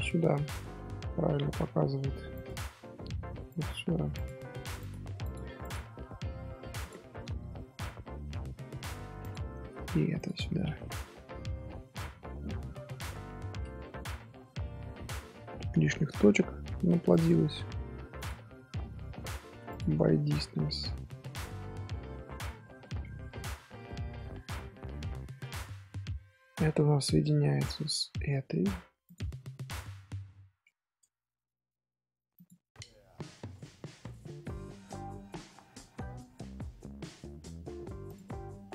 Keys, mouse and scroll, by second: 2.3 click, 3.4 click, 4.1 shift+click, 4.8 click, 5.2 click, 5.6 click, 6.8 shift+click, 7.7 j, 9.2 click, 10.1 shift+click, 11.0 j, 11.8-12.7 middle drag, 12.7 Tab, 13.0 middle click, 13.5 z, 13.7-14.5 scroll up 2, 14.5 shift+middle click, 14.9 z, 15.2 middle click, 15.5 scroll up 1, 15.8 shift+middle click, 16.1-16.7 scroll up 1, 16.7 middle click, 17.1 click, 20.0 scroll down 1, 20.3 Tab, 20.8 scroll down 3, 20.9-21.5 middle drag, 21.5 z, 22.5 scroll down 2, 23.0 Tab, 23.3-24.4 middle drag, 24.4 scroll down 2, 24.7-28.6 middle drag, 28.6 click, 29.0 shift+click, 30.2 j, 32.4 click, 32.9 middle drag, 33.2 z, 33.5 middle drag, 33.7 z, 34.0-34.6 middle drag, 34.6 Tab, 35.7 middle click, 36.3 Tab, 38.0 click.